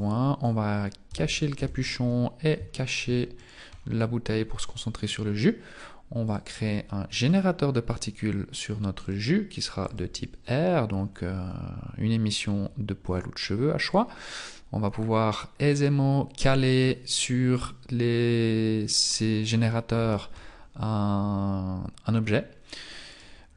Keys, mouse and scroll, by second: 0.0 right click, 1.1 h, 1.4 right click, 1.5 h, 2.1-2.7 scroll up 3, 2.7 shift+middle click, 2.7 scroll up 1, 3.4 right click, 3.7-4.3 scroll down 5, 7.4 click, 10.0 click, 11.0-14.0 scroll up 3, 14.0 click, 18.1-19.1 scroll up 1, 19.1 scroll down 2, 19.7 middle click, 20.3-21.3 scroll down 1, 21.3 scroll down 1, 23.1 right click.